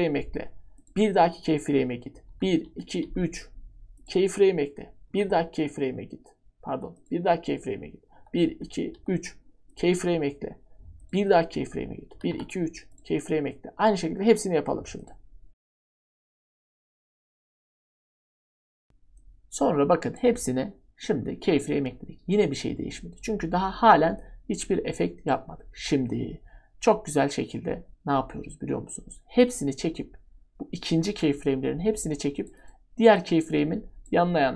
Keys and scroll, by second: 2.3 Page_Down, 3.0 typing, 5.1 Page_Down, 8.1 Page_Down, 8.9 Page_Down, 12.1 Page_Down, 15.6 Page_Down, 16.0 Page_Down, 16.3 Page_Down, 16.4 Page_Down, 16.5 Page_Down, 16.9 Page_Down, 17.0-19.1 typing.